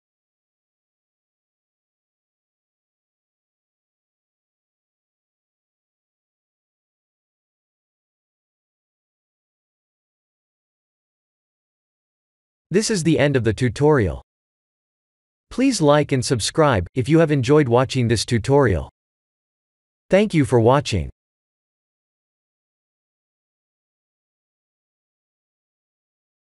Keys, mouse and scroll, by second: 1.8-3.1 scroll up 3, 3.1-3.8 scroll up 2, 4.9 click, 7.7-9.0 scroll down 5, 9.0 scroll down 1, 10.4 click.